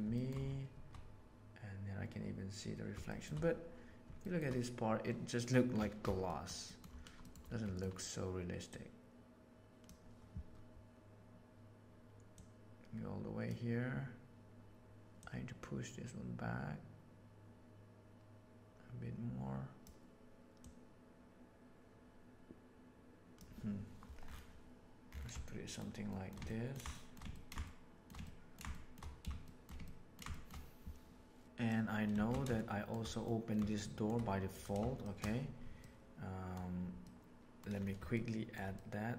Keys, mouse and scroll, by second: 3.1 shift+middle click, 4.1 shift+middle click, 6.3 middle click, 6.7 middle click, 7.2 middle click, 7.6 middle click, 8.6-9.8 drag, 12.4 click, 15.1-16.3 drag, 19.5 click, 20.6-23.3 drag, 25.3-25.8 shift+middle drag, 26.1 shift+middle click, 26.5 ctrl+middle click, 26.9 shift+middle click, 27.2 ctrl+middle click, 27.6 shift+middle click, 28.2 ctrl+middle click, 28.7 shift+middle click, 29.5 shift+middle click, 29.9 ctrl+middle click, 30.3 shift+middle click, 31.4 click, 32.5-32.9 shift+middle drag, 33.2 middle drag, 33.7-34.0 shift+middle drag, 34.4 click, 34.9 shift+middle drag, 35.8-36.5 middle drag, 36.9 middle click, 38.1-38.5 shift+middle drag, 38.7-39.1 middle drag.